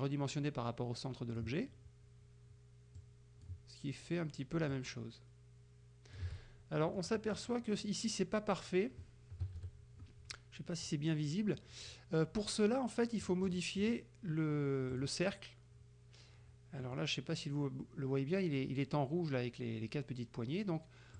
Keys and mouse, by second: 3.0-3.7 ctrl+shift+drag, 4.8-6.4 ctrl+shift+drag, 7.0 click, 9.5 KP_Subtract, 13.3-13.8 drag, 13.9 click, 15.0 click, 16.9 middle click.